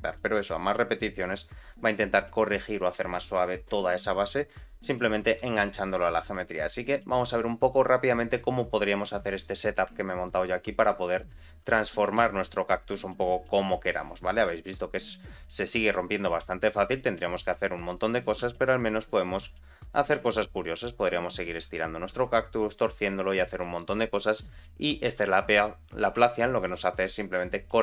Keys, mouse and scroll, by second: 0.0 click, 0.4 click, 0.7 click, 0.9 click, 1.2 click, 8.3-8.8 scroll down 2, 9.4-9.8 scroll up 2, 10.0 shift+middle click, 10.4-11.1 scroll down 2, 11.1 click, 11.1 scroll down 1, 11.5 g, 17.2 r, 18.4 g, 19.3 r, 20.1 g, 22.1 middle click, 22.9 Tab, 23.1 middle click, 24.2 r, 25.1 g, 26.0 Tab, 26.5 click.